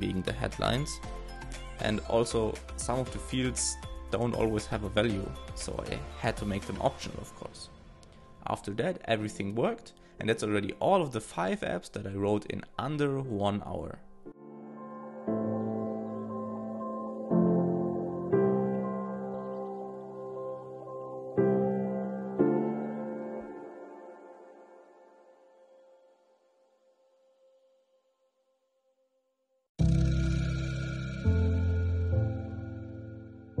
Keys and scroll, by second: 2.4 alt+{, 3.7 alt+shift+Left.